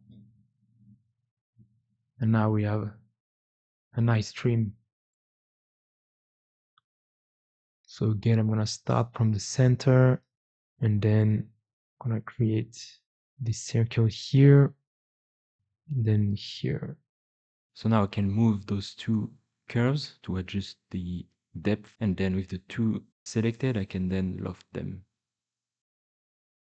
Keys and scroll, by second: 16.4 o, 17.0 Escape, 17.9 2, 18.3 g, 21.4 l, 21.8 3, 22.7 x, 23.4 x, 24.5 Escape, 24.7 4.